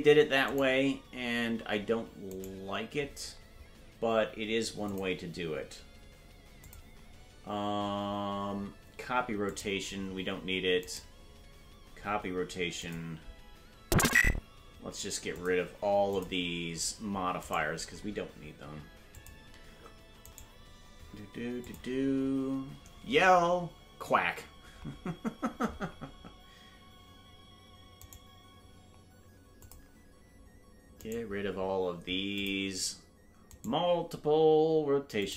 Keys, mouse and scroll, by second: 4.4 right click, 4.9 click, 6.6 click, 9.4 click, 11.0-11.9 right drag, 12.8 click, 14.3 right click, 15.3 click, 16.1 click, 17.7 right click, 19.1 click, 20.5 right click, 21.6 click, 29.6 click, 29.6 right click, 31.3 right click, 32.3 click, 33.8 right click, 35.2 click.